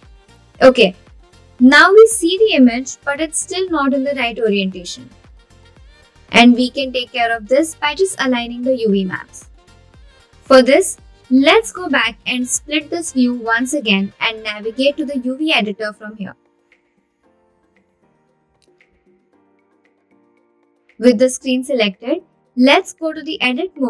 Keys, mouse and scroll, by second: 12.5-14.0 drag, 15.1-16.2 middle drag, 16.8-22.1 drag, 22.6-23.8 scroll up 4.